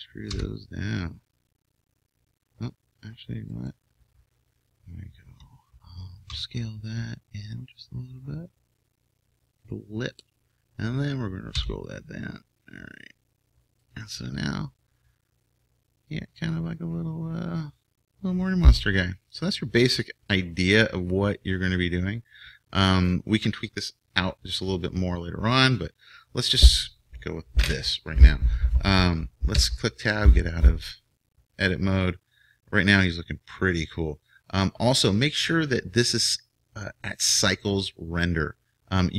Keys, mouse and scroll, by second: 0.3 e, 6.3 s, 10.2-12.0 drag, 11.6 e, 14.7-16.1 middle drag, 24.7-27.3 middle drag, 29.6 Tab.